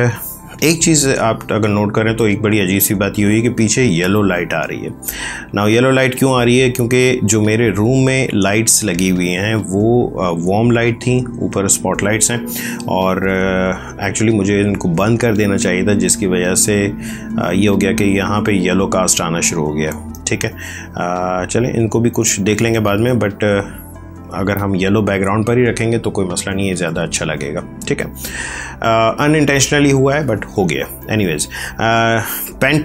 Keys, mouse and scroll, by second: 0.8 space, 1.1 click, 1.3 space, 15.5 ctrl+click, 19.9 ctrl+click, 22.4 click.